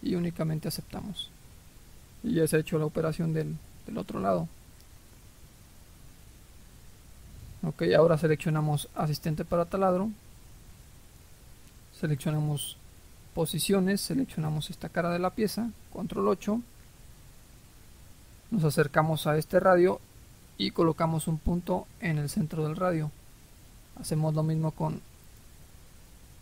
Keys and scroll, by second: 15.8 ctrl+8.